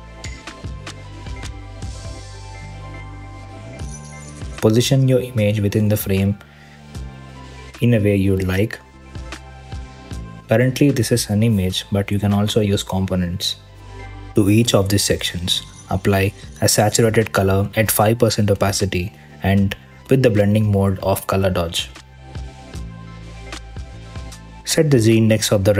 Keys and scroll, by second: 4.2 super+c, 4.6 super+v, 6.8 super+c, 7.0 super+d, 7.8 BackSpace, 8.0 super+v, 9.0 super+d, 9.5 super+c, 9.7 super+v, 9.9 BackSpace, 11.1 super+d, 11.6 BackSpace, 11.9 super+c, 12.1 super+v, 14.6 Return, 16.5 5, 16.7 Return.